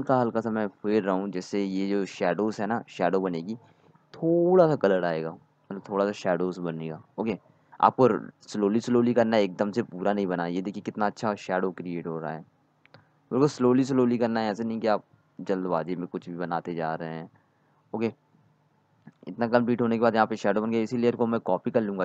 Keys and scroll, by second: 1.4 z, 15.8-16.7 typing, 20.3 z.